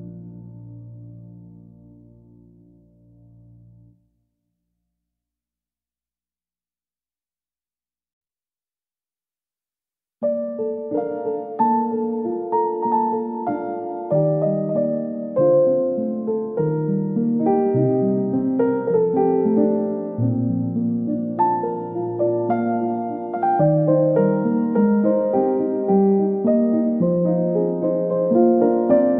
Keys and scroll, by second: 13.5 ctrl+z.